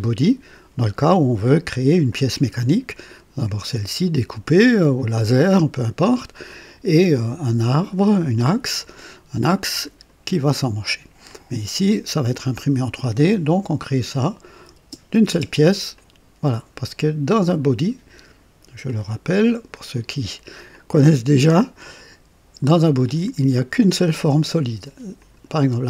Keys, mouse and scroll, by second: 2.1 click, 5.1-6.7 drag, 9.4 click, 11.3 click, 12.2 click, 14.1 click, 14.7 space, 15.3 space, 15.9-16.9 drag, 18.8 click, 20.0 right click, 20.8 click, 22.0 click, 23.0 click, 25.2 click, 25.4 typing.